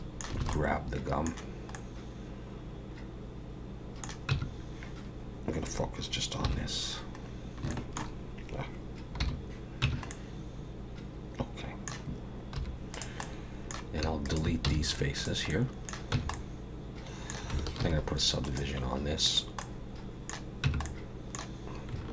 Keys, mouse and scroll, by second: 0.4 alt+a, 0.5 middle click, 1.7 middle click, 4.3 Tab, 6.4 /, 7.3 scroll down 4, 7.7 shift+middle click, 9.2 /, 9.8 Tab, 10.1 middle click, 12.6 3, 12.9 click, 13.2 middle click, 14.2 shift+click, 14.6 x, 15.5 middle click, 16.1 Tab, 16.3 middle click, 17.8 ctrl+2, 18.4 right click, 19.6 middle click, 20.7 Tab, 20.8 middle click.